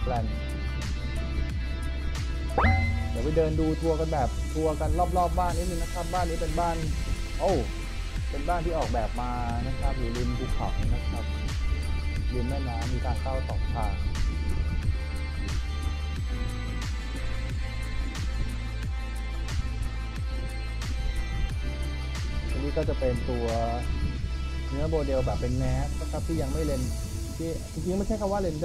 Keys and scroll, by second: 2.6 e, 3.6 w, 4.0 d, 4.6 w, 6.3 w, 9.9 a, 16.5 w, 18.7 w, 20.7 w, 22.2 F3, 24.3 F4, 26.3 w, 27.4 d, 28.0 w.